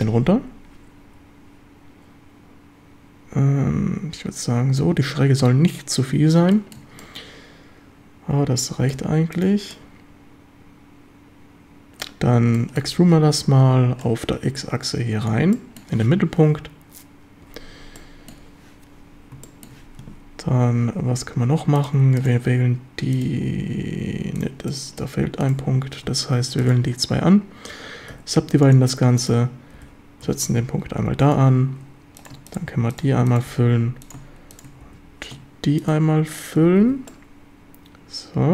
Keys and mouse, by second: 6.5 shift+middle drag, 7.0-8.9 middle drag, 9.7-12.0 middle drag, 12.6 shift+drag, 12.9 e, 13.2 Escape, 14.1-15.3 drag, 15.6 click, 18.0-18.4 drag, 19.5 shift+middle drag, 24.4-24.7 shift+drag, 24.7-25.1 middle drag, 28.1 w, 29.8 g, 30.3 x, 31.2 ctrl+click, 33.6 f, 34.9 f, 36.7 f, 36.9 a, 37.1-38.5 drag.